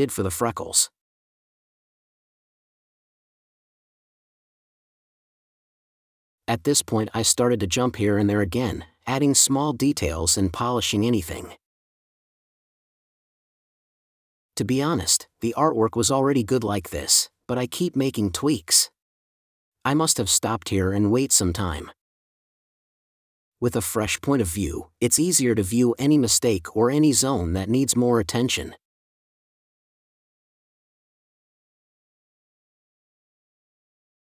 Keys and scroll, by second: 2.8 space, 6.4 space, 9.0 super+s, 10.7 super+e, 13.2 space, 16.0 space, 19.1 super+space, 21.7 space, 24.8 space, 27.4 space, 30.6 super+z, 31.5 space, 33.5 space.